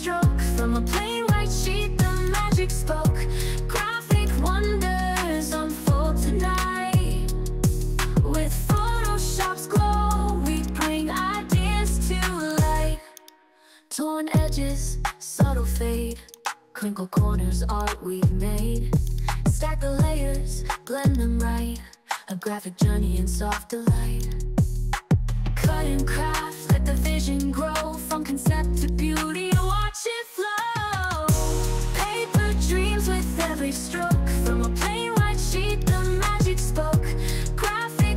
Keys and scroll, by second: 15.3 ctrl+t.